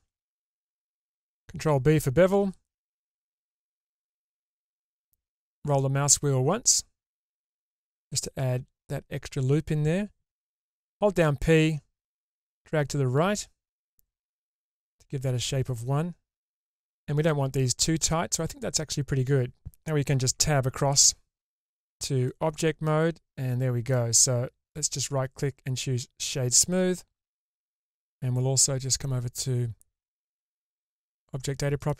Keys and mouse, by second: 2.0 ctrl+b, 20.2 Tab, 21.4-23.9 middle drag, 24.8-26.3 right drag, 27.7 click, 30.0 click, 31.8 click.